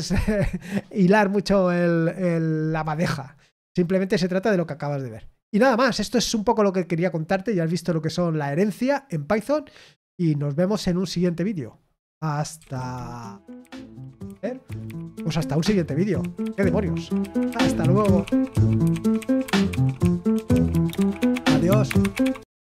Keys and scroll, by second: 12.5 super+x.